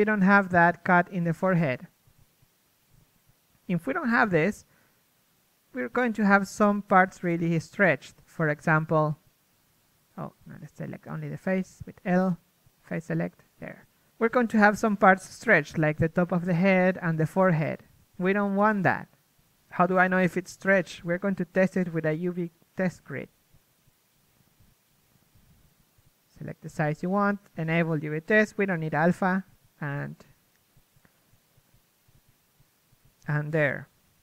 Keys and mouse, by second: 0.5 a, 1.9 c, 4.9-6.1 drag, 6.1 ctrl+e, 7.2 a, 8.6 l, 9.3 u, 11.4 ctrl+Tab, 12.6 ctrl+Tab, 12.6-16.1 typing, 19.6 KP_1, 21.1 ctrl+space, 24.2-25.9 drag.